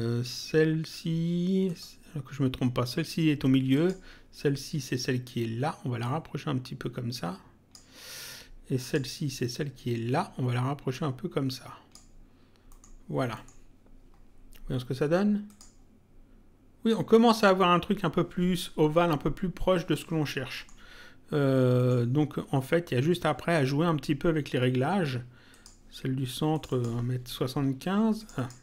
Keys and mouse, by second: 1.7 click, 3.7 click, 6.0 click, 8.8 click, 10.9 click, 12.7 middle click, 15.5 click, 20.6 middle click, 21.7 middle click, 25.5 click, 28.1 click.